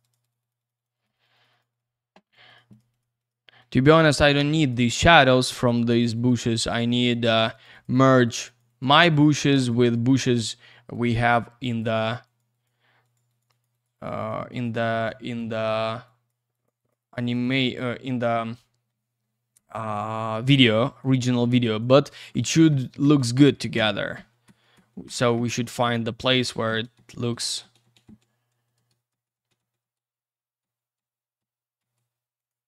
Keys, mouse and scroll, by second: 0.0 click, 0.1 double click, 0.2 click, 0.3 click, 0.4 click, 0.5 double click, 0.6 click, 0.7 click, 0.7 click, 0.8 double click, 0.9 click, 1.0 click, 1.1 click, 1.2 double click, 1.3 click, 1.4 click, 1.5 click, 1.6 double click, 1.7 click, 1.8 click, 2.2 click, 2.3 click, 2.5 click, 2.5 click, 2.7 click, 2.8 double click, 2.9 click, 3.0 click, 3.2 click, 3.3 double click, 3.6 click, 3.7 click, 3.8 click, 3.9 double click, 4.0 click, 4.1 click, 4.2 click, 4.3 double click, 4.4 click, 4.5 click, 4.6 click, 4.7 double click, 4.8 click, 4.9 click, 5.0 click, 5.1 double click, 5.2 click, 5.3 click, 5.4 click, 5.5 double click, 5.6 click, 5.8 click, 5.9 click, 6.0 double click, 6.1 click, 6.3 click, 6.4 click, 6.5 double click, 6.6 click, 6.8 click, 6.9 click, 7.0 double click, 7.1 click, 7.2 click, 7.3 click, 7.4 double click, 7.5 click, 7.6 click, 7.7 click, 7.8 double click, 7.9 click, 8.0 click, 8.2 click, 8.3 double click, 8.4 click, 8.6 click, 8.7 click, 8.8 double click, 8.9 click, 9.0 click, 9.1 click, 9.2 double click, 9.3 click, 9.5 click, 9.6 click, 9.7 double click, 9.8 click, 9.9 click, 10.0 click, 10.1 double click, 10.2 click, 10.3 click, 10.9 click, 12.2 click, 12.4 click, 12.5 click, 12.6 double click, 13.0 click, 13.1 click, 13.3 click, 13.4 double click, 13.5 click, 13.6 click, 13.7 click, 13.8 double click, 13.9 click, 14.0 click, 14.2 click, 14.3 double click, 14.5 click, 14.6 click, 14.9 click, 15.0 double click, 15.4 click, 16.0 click, 16.5 click, 16.6 click, 16.8 click, 16.9 double click, 17.0 click, 17.1 click, 17.2 click, 17.3 double click, 17.4 click, 17.5 click, 17.6 click, 17.7 double click, 20.4 click, 20.5 click, 20.9 click, 21.0 double click, 21.2 click, 21.3 click, 21.4 click, 21.5 double click, 21.7 click, 21.8 click, 22.3 ctrl+z, 32.4 click, 32.5 click.